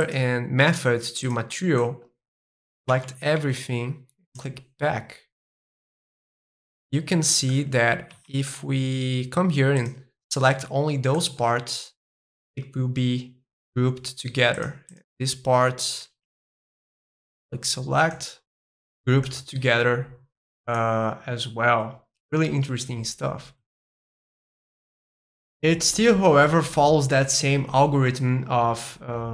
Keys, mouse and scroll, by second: 0.0-1.8 drag, 1.8-2.9 middle drag, 2.9 a, 4.2-6.3 drag, 6.7-8.1 middle drag, 8.1 a, 8.5-9.7 middle drag, 9.7-11.1 drag, 11.1-13.2 middle drag, 14.5-16.2 drag, 16.2 a, 16.5 middle click, 17.3 click, 18.1-20.1 middle drag, 20.7-22.8 middle drag, 24.0-25.2 drag, 25.2-27.2 middle drag.